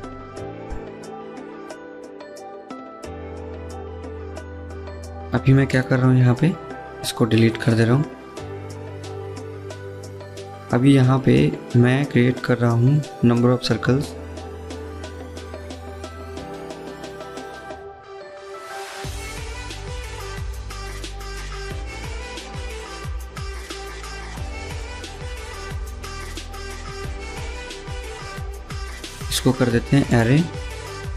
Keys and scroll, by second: 6.3 Delete, 8.6 ctrl+z, 26.8 Escape, 27.1 Escape.